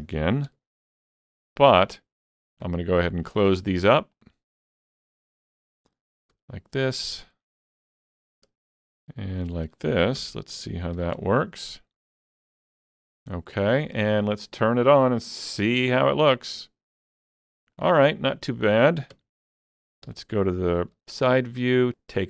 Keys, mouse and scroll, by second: 0.5 ctrl+alt+q, 2.0 shift+middle click, 3.2 click, 4.1 shift+click, 4.6 shift+click, 5.2 shift+click, 6.3 f, 7.0 shift+click, 8.9 shift+click, 9.3 shift+click, 10.2 f, 11.0 alt+a, 11.2 Tab, 11.9 middle click, 12.0-12.4 scroll down 4, 13.4 scroll down 1, 13.7 shift+middle click, 16.2 click, 17.1-17.6 scroll up 2, 17.8 shift+middle click, 18.1-21.0 shift+middle drag, 19.1 Tab, 20.1 KP_3, 21.0 alt+z.